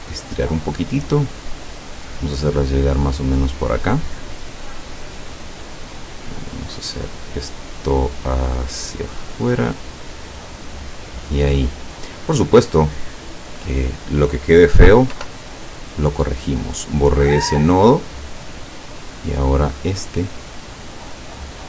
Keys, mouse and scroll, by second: 3.8 click, 6.6 click, 8.3 click, 10.3 click, 11.2 click, 12.9 click, 14.0 click, 15.2 Delete, 16.5-18.4 drag, 19.2-21.6 drag.